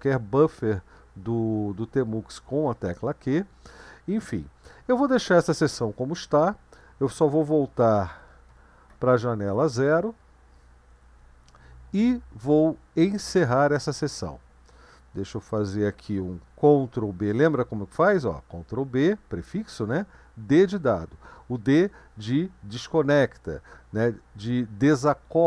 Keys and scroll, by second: 8.0 ctrl+b, 8.5 0, 17.0 ctrl+b, 19.8 d.